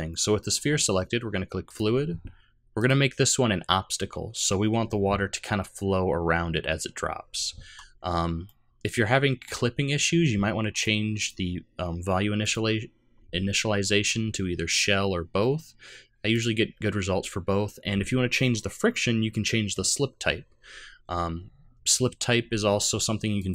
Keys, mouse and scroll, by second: 1.6 click, 2.8 click, 8.4 middle click, 10.7 click, 12.4 click, 23.4 click.